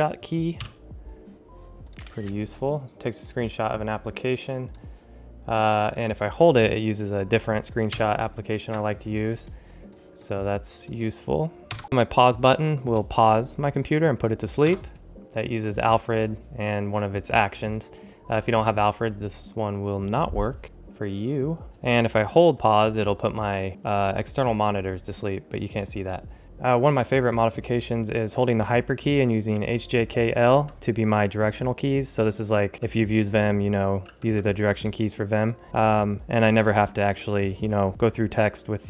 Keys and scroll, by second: 8.3 shift+super+2, 11.6 ⟲.